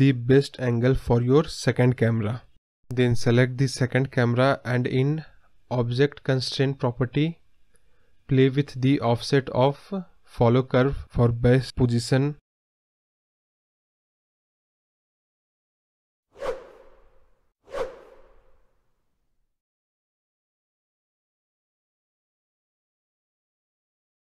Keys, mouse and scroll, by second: 3.1 scroll down 1, 3.2 click, 4.5 click, 8.9-9.3 scroll down 3, 9.1 middle click, 9.3-10.2 middle drag, 10.2 scroll down 3, 10.3-10.8 middle drag, 10.8 scroll down 1, 11.0-11.6 middle drag, 11.6 click, 13.1-14.4 drag, 14.4 KP_0, 14.8-15.9 scroll up 2, 15.9-18.6 drag, 19.8-22.5 drag, 23.7 click.